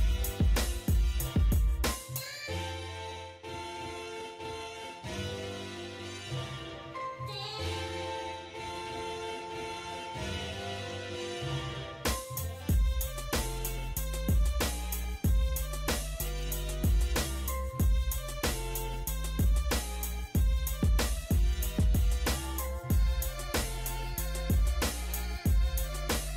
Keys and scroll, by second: 4.5 l, 4.6 space, 5.8 Escape, 9.8 6, 10.2 0, 10.5 Return, 10.9 Escape, 12.5-13.4 typing, 13.4 Escape, 14.6 l, 14.7 space, 15.9 Escape, 18.8 5, 19.3 Return, 19.5 Escape, 25.2 1, 25.6 8, 25.8 Return.